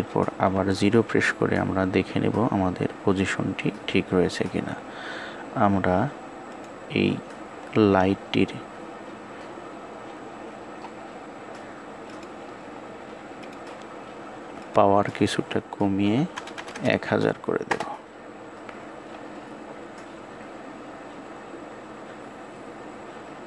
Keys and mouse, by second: 16.3-23.4 drag, 16.3 KP_0.